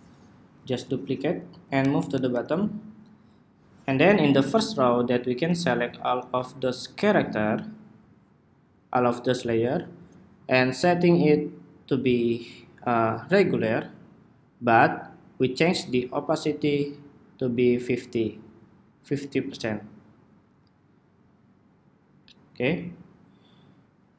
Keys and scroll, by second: 0.3 super+d.